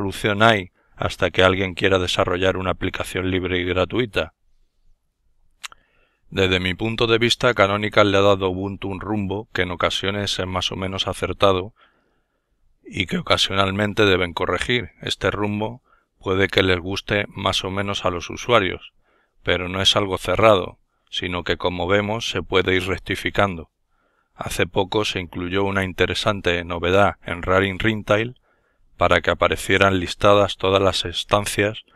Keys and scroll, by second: 9.0-9.6 typing, 11.0-11.4 typing, 12.5 Return, 24.6 alt+n, 30.9 x.